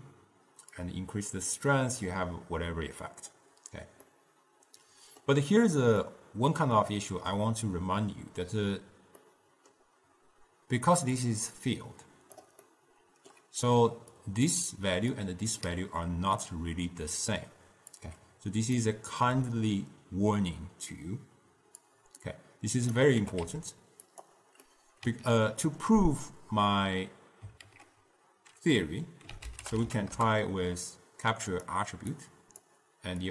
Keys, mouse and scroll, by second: 0.9-3.9 drag, 4.3-9.2 middle drag, 9.3-11.3 middle drag, 11.3-12.9 drag, 12.9 middle click, 13.8-15.7 typing, 14.3 click, 15.3 click, 18.1-19.4 drag, 19.4 x, 22.0-23.6 drag, 23.6 g, 24.8-27.8 middle drag, 27.8 ctrl+a, 32.3-33.3 drag.